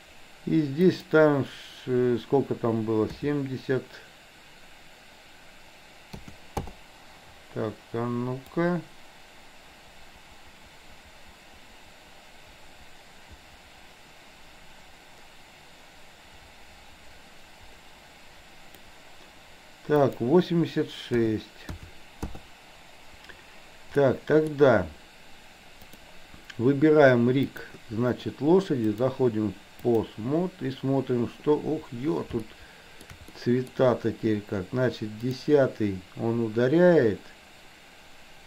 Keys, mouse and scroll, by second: 0.9-6.8 drag, 8.6-18.9 drag, 20.0-22.4 drag, 24.1-24.6 middle drag, 25.9 drag, 27.5 click, 29.0-30.1 drag, 32.6-33.1 shift+middle drag, 33.4 middle click, 35.3 click.